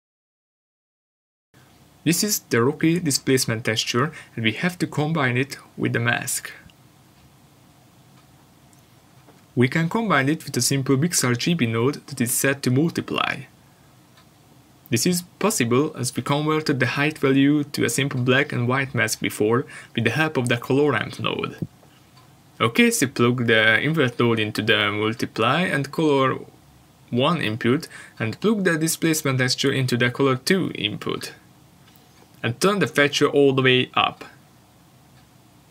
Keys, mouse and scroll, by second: 8.1 shift+a, 10.1 click, 14.4 click, 15.8 click, 18.4 click, 19.4 click, 23.1 click, 25.1 click, 30.4 ctrl+shift+click, 31.7-32.4 scroll down 1, 33.4 middle click.